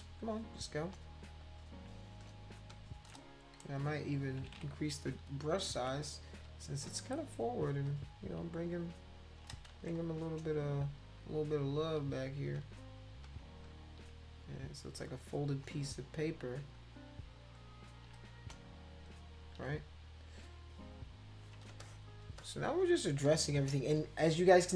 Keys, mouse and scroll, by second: 0.6 click, 1.4 shift+click, 2.2 click, 2.7 shift+click, 4.4 ], 4.6 ], 5.8 [, 6.6 click, 7.8 shift+click, 9.0 shift+click, 9.7 ctrl+z, 10.1 click, 11.0 shift+click, 12.5 click, 13.2 click, 13.6 shift+click, 15.0 click, 15.8 shift+click, 16.8 shift+click, 17.6 shift+click, 18.3 click, 19.0 shift+click, 21.7 space, 21.8 click, 22.4 click, 23.2 click.